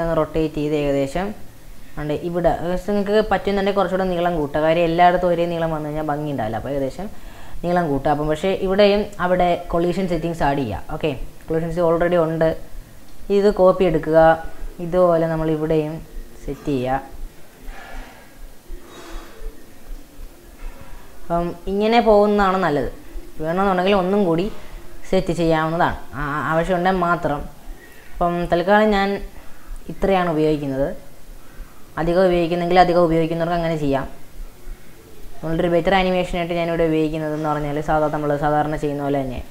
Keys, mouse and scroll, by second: 0.0 r, 1.8 s, 3.1 ctrl+z, 3.5 Tab, 3.7 middle click, 4.2 click, 4.5 middle click, 5.3 e, 6.7 click, 8.6 Tab, 9.6-10.2 scroll up 1, 10.2-11.5 scroll up 3, 11.5 g, 13.5 shift+d, 14.9 r, 16.8 g, 18.0 r, 20.0-22.8 shift+middle drag, 22.8 g, 24.2-24.7 scroll down 2, 24.7-25.7 scroll up 3, 25.7 shift+d, 26.9 r, 28.2 g, 33.3 g, 35.5-39.5 shift+middle drag.